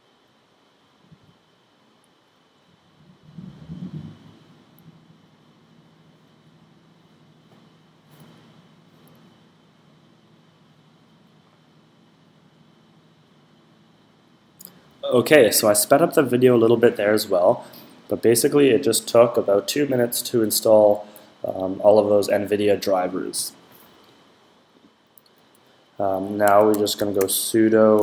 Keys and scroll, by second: 26.1-28.0 typing.